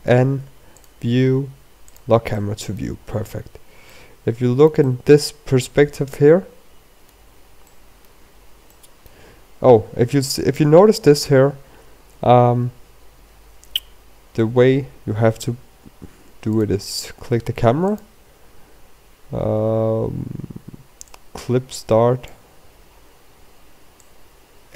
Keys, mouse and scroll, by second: 0.7 n, 1.7 click, 2.9 click, 3.3 middle click, 3.9-4.6 scroll down 12, 4.9 shift+middle click, 5.8 middle click, 8.2 scroll down 3, 8.6 middle click, 9.2 scroll up 3, 9.7 shift+middle click, 11.2-11.6 scroll down 3, 11.7-12.0 scroll up 3, 12.0-12.6 scroll down 4, 12.6-13.5 scroll up 3, 17.5 click, 18.9 click, 22.1 click, 23.6 scroll down 2, 23.9 scroll up 2.